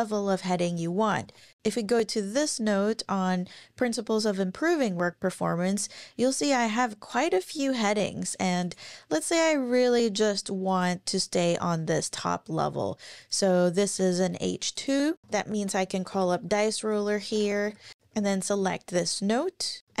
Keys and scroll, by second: 0.5 super+`, 1.2 super+`, 1.6 ctrl+super+r, 15.2-18.4 typing, 19.8 Return.